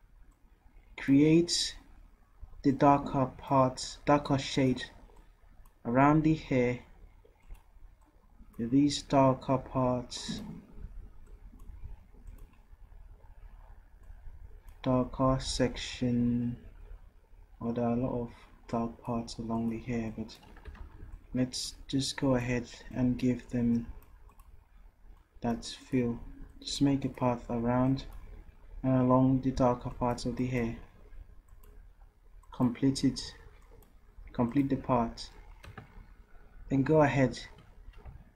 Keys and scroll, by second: 20.9 ctrl+z, 38.1 v.